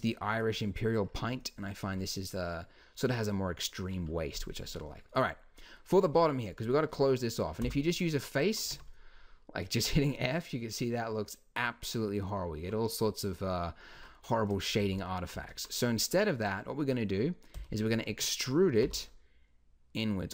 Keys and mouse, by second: 7.6 f, 8.7 Tab, 13.9 Tab, 14.8 ctrl+z, 15.3 ctrl+z, 17.5 e, 18.8 s.